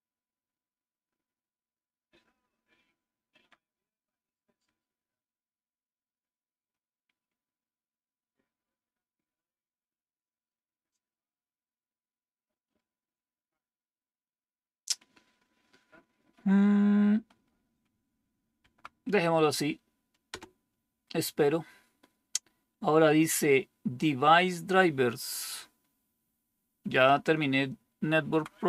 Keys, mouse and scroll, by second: 1.2-3.3 Down, 3.5 Down, 4.6-6.6 Up, 18.5 Right, 20.2 Return, 28.1 Right.